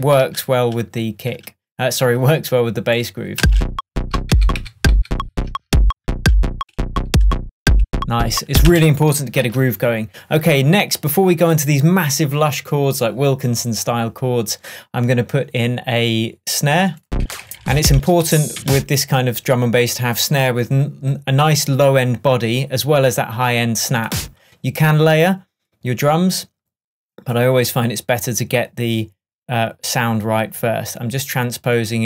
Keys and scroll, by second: 3.4 space, 4.2 super+space, 4.3 super+d, 8.7 space, 9.4 super+space, 9.5 super+s, 17.2 Down.